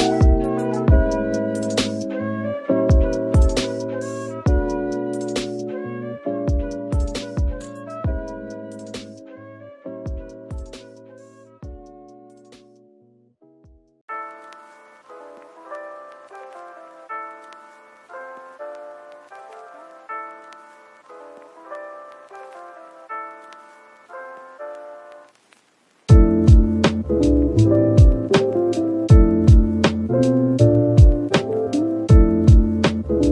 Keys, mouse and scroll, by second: 4.3 right click, 4.7-5.0 scroll up 1, 5.5 typing, 7.2 Tab, 7.9 s, 9.1 alt+click, 9.8 s, 11.6-13.8 scroll down 1, 13.9 Tab, 14.3 middle click, 15.0-15.4 scroll down 1, 15.4 middle click, 16.7 double click, 18.7-19.1 typing, 21.1 Tab, 21.5-22.7 typing, 24.8 Tab, 25.4 typing, 26.3 middle click, 26.9-27.8 typing, 29.6-30.4 scroll up 1, 30.1-31.2 typing, 32.7-33.3 typing.